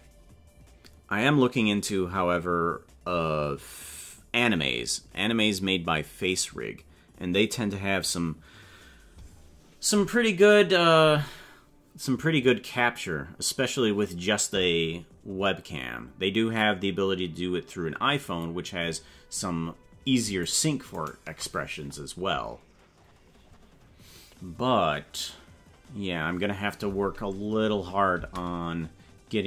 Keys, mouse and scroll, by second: 10.5 right click, 20.5 shift+right click, 21.0 shift+right click, 22.2 scroll up 2, 22.9 scroll up 1, 28.2 space.